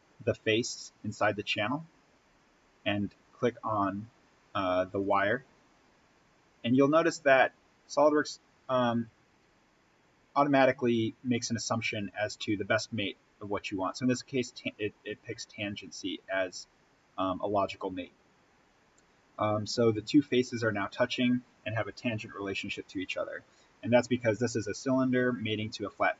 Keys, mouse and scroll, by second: 1.0 click, 4.9 click, 17.6-18.2 scroll down 1, 23.3-25.2 scroll up 1.